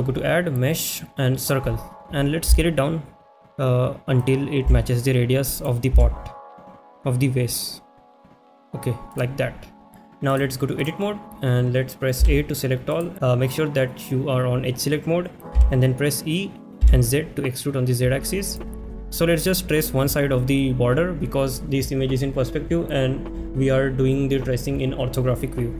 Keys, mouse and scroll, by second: 4.2 click, 4.2 s, 5.6 click, 5.6 s, 9.1 click, 10.3-10.9 drag, 12.9 click, 12.9 a, 18.5 z.